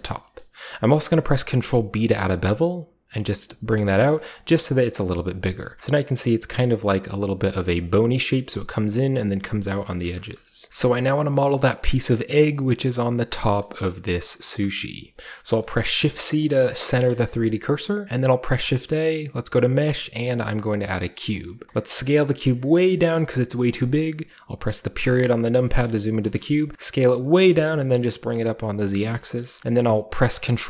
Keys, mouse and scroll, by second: 0.0 middle click, 0.4-3.6 middle drag, 1.3 ctrl+b, 3.7 click, 3.9-9.9 middle drag, 3.9-4.6 scroll up 1, 4.4 click, 4.6-5.6 scroll down 1, 10.1 middle click, 10.3 shift+middle click, 10.4 shift+scroll down 2, 10.7 shift+middle click, 10.7-12.9 shift+scroll up 1, 11.0-12.9 shift+middle drag, 13.6 shift+middle click, 14.2 shift+middle drag, 14.7-16.4 shift+middle drag, 16.4 shift+click, 17.3-18.0 scroll up 1, 18.0 a, 20.9 click, 21.5-22.0 scroll down 1, 22.0 click, 22.9 click, 25.6-27.6 typing, 25.9-26.2 middle drag, 26.4 middle click, 27.2 click, 28.7 click, 29.1-30.6 shift+scroll up 2, 30.1 ctrl+a, 30.1-30.6 ctrl+middle drag.